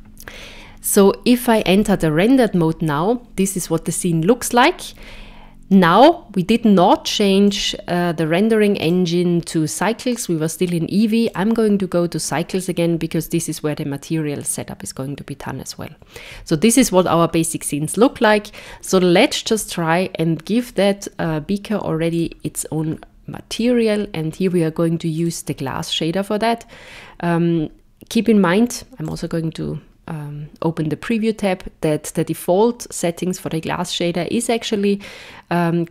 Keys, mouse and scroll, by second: 0.4 z, 7.5 click, 8.9 click, 18.0 click, 20.6 click, 22.1 click, 23.5 click, 29.1 click.